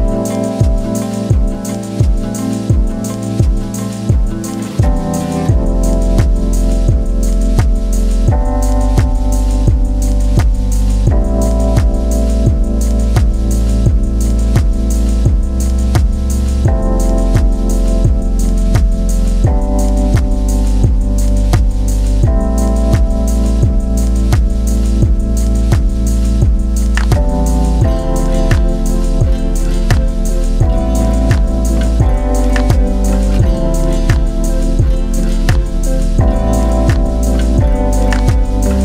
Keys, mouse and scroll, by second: 15.1 click, 16.4 scroll up 1, 16.4 middle click, 17.3-18.9 scroll down 1, 18.9 click, 21.5 click, 31.8 click, 35.5-36.2 scroll up 1, 36.2-37.7 middle drag, 37.7-38.8 drag.